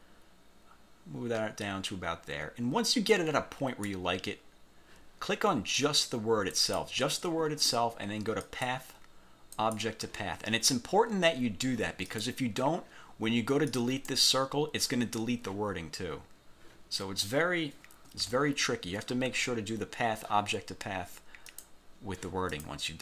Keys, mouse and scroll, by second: 5.9 click, 6.7 click, 8.6 click, 9.7 click, 12.2 click, 13.8 click, 18.3 ctrl+z, 21.6 click, 22.7 click.